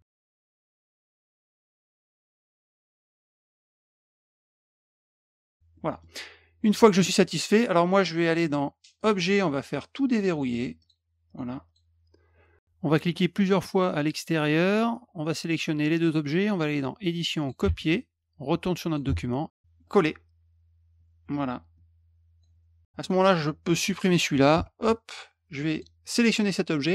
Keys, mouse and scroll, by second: 0.0 click, 0.2 click, 1.2 click, 1.7 click, 2.0 click, 2.4 click, 2.7 click, 3.4 click, 3.8 click, 4.1 click, 4.7 click, 4.8 click, 5.3 click, 5.7 middle drag, 9.0 click, 10.8 click, 11.3 click, 11.6 click, 14.2 click, 14.4 click, 14.5 click, 14.6 click, 15.1 click, 15.9 shift+click, 17.1 click, 18.0 click, 19.8 click, 21.7-22.4 drag, 23.0 click, 23.3-23.8 drag, 25.7 click.